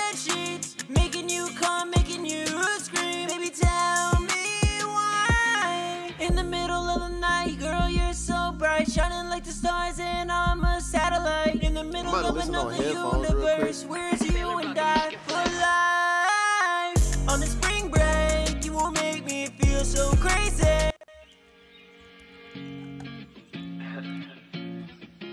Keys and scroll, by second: 6.8 super+Tab, 20.2 Return, 20.5 space, 22.1 ctrl+super+w.